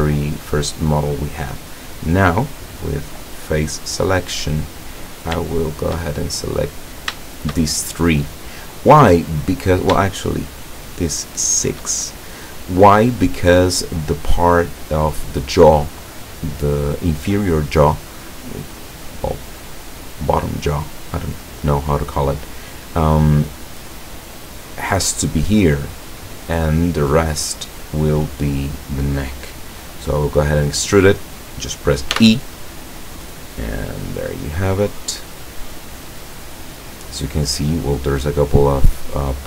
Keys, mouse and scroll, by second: 2.4 click, 5.0 right click, 5.7 shift+right click, 7.3 shift+right click, 8.1-10.0 shift+middle drag, 10.6 shift+right click, 11.0 shift+right click, 11.5 shift+right click, 12.2-13.6 shift+middle drag, 21.9-23.8 middle drag, 24.0-25.0 middle drag, 27.0-29.1 middle drag, 32.2 e, 36.4 click, 36.9-38.6 middle drag, 39.0-39.4 middle drag.